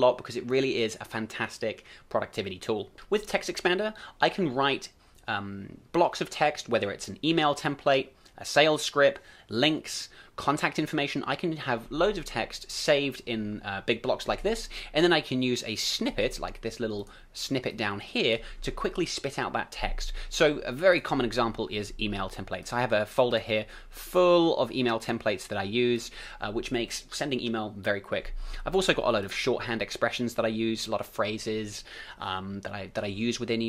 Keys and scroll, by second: 2.9 ctrl+alt+super+t.